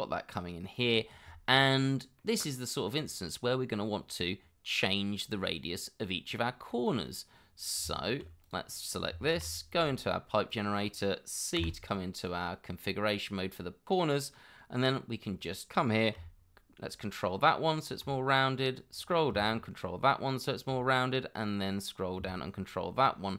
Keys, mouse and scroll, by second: 1.7 shift+middle click, 2.2 middle click, 6.0-6.5 scroll up 1, 6.5 middle click, 7.8 Tab, 9.0 scroll down 1, 9.3 shift+2, 11.6 c, 13.1-13.9 scroll down 1, 18.5-18.9 scroll down 1, 21.3 scroll up 1, 21.6 scroll down 1.